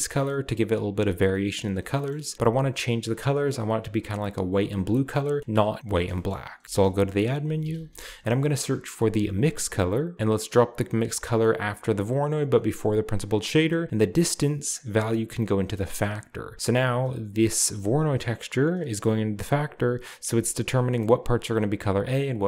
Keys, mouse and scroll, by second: 2.1-2.7 middle drag, 6.3-6.7 middle drag, 6.7-7.9 typing, 7.4-9.1 drag, 9.4 click, 12.5-13.8 drag, 14.7-16.0 drag, 17.7 click.